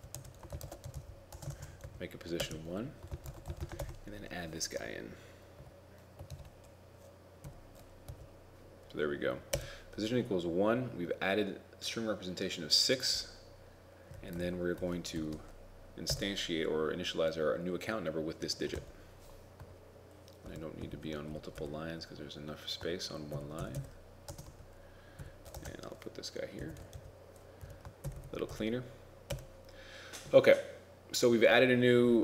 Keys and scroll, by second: 3.8 shift+9, 6.4 ctrl+v, 14.5 ctrl+Right, 15.2 shift+End, 21.0 shift+Home, 23.5 shift+Home, 28.1 shift+Home, 28.2 shift+Home.